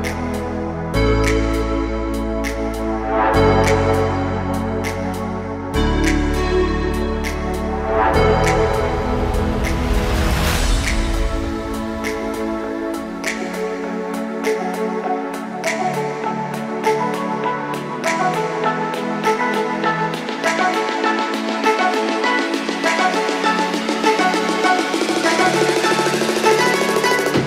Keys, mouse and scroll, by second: 0.3 click, 5.0 click, 5.5-6.7 middle drag, 7.3 KP_7, 8.4 Tab, 8.8-9.3 scroll up 1, 9.4-10.3 shift+middle drag, 11.0 click, 13.2 shift+click, 13.9 shift+click, 14.3 shift+click, 15.1 shift+click, 15.5 shift+click, 15.8 shift+click, 16.1 shift+click, 18.6 s, 19.0 y, 23.8 click, 24.2-25.3 middle drag, 25.8 shift+middle click, 27.3 3.